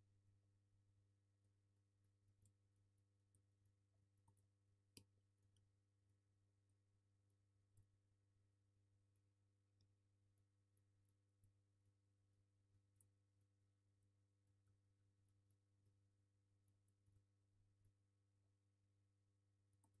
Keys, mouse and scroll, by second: 0.1 scroll up 1, 0.3 alt+middle click, 1.0-1.4 middle drag, 1.0-1.4 scroll down 2, 1.4 click, 2.5 alt+middle click, 2.7-3.3 drag, 3.3 alt+middle drag, 3.9 scroll up 1, 4.1 ctrl+click, 4.4 alt+q, 4.5-5.4 alt+middle drag, 4.9 KP_7, 5.2-5.6 scroll up 3, 5.4 click, 6.0 click, 6.2-6.6 scroll up 1, 6.6 click, 6.9 F3, 7.3 click, 7.7 Tab, 8.0 scroll up 1, 8.2 middle click, 8.3-8.9 scroll down 1, 9.1 click, 9.3-9.6 scroll up 1, 9.8 1, 10.0-10.3 scroll down 2, 10.3 click, 10.9 3, 11.0 click, 11.1 scroll down 2, 11.2 middle click, 11.8-13.4 alt+shift+drag, 13.4 Delete, 13.6-15.2 middle drag, 13.7-14.0 scroll down 2, 14.0 alt+q, 14.9-15.2 scroll up 2, 15.2 click, 15.6 scroll up 1, 15.8 Tab, 16.6 click, 16.9 alt+middle drag, 17.1 click, 17.8 q, 19.7 click, 19.8 alt+z.